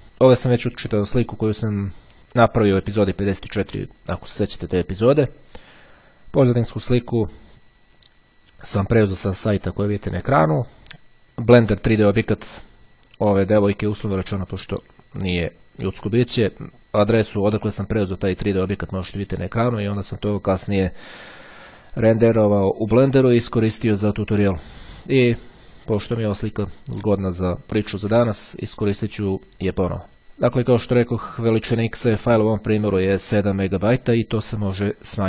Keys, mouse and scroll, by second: 30.2 click, 31.6 right click, 33.0 click.